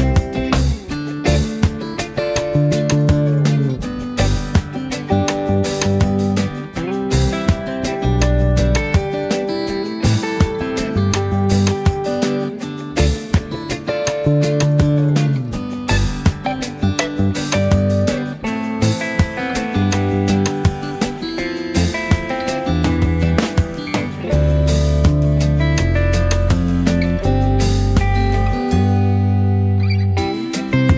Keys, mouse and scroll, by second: 3.7 z, 3.9 click, 4.0 space, 4.3-4.8 click, 4.8 v, 5.9-8.6 drag, 13.6 click, 14.2 space, 14.4 click, 14.8 space, 15.0 click, 15.8 space, 16.0 click, 16.3 space, 16.6 click, 17.4 v, 18.0-18.9 drag, 19.6 Down, 22.4 click, 22.6-27.4 typing, 22.8 click, 23.4 click, 23.9 click, 24.8 click, 25.5 click, 25.9 click, 27.1-27.6 click, 28.5 right click, 30.0 click, 30.6 space, 30.8-30.9 drag.